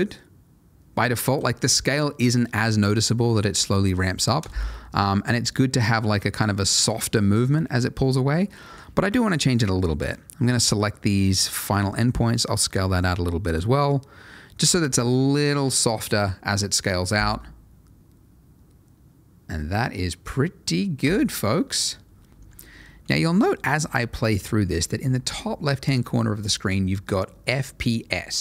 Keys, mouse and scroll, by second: 1.3 Escape, 4.4 space, 8.6 Escape, 9.5 click, 11.7 s, 12.9 click, 13.4 space, 21.0 Escape, 21.7 click, 22.3 space.